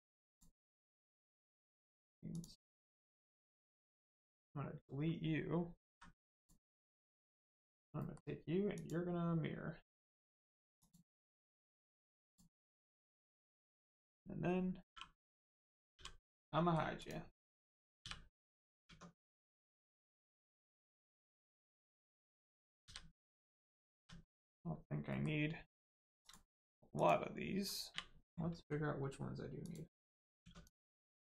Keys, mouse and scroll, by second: 0.7 middle click, 1.4 shift+middle click, 2.2 click, 2.3 click, 3.6 middle click, 5.8 x, 6.7 middle click, 7.4 click, 7.9 middle click, 8.7 click, 11.5 middle click, 12.2 click, 12.6 middle click, 13.2 shift+middle click, 13.5 click, 16.4 middle click, 16.9 click, 18.4 middle click, 18.8 Tab, 19.2 middle click, 20.1 shift+middle click, 20.9 middle click, 21.2 middle click, 23.6 middle click, 24.2 middle click, 26.2 click, 29.6 click, 30.4 Tab, 30.6 click.